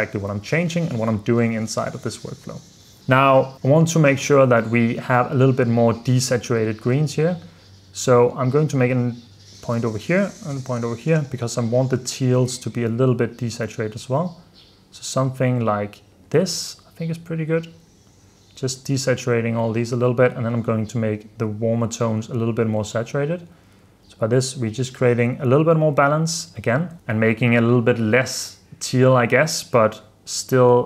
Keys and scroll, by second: 0.9 super+f, 1.8 super+d, 3.0 super+s, 23.1 super+d, 23.8 super+f, 24.2 super+d, 25.2 super+d, 26.0 super+f, 27.0 super+s.